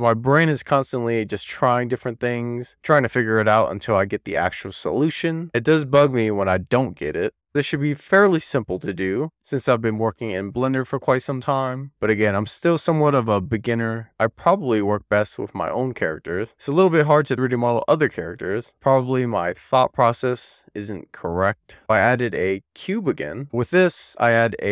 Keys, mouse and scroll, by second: 5.6 click, 7.3 click, 22.1 shift+a, 23.4 click.